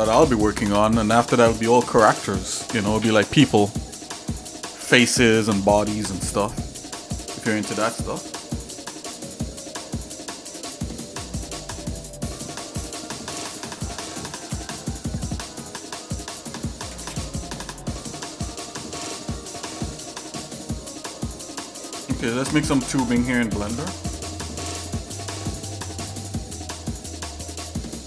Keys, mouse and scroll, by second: 6.8 shift+middle click, 7.4 middle click, 8.4 click, 9.0 click, 12.8-14.8 drag, 16.4 click, 18.2 shift+middle click, 18.9 middle click, 21.5 shift+right click, 22.2 scroll up 1, 22.5 scroll down 1, 23.5 shift+a.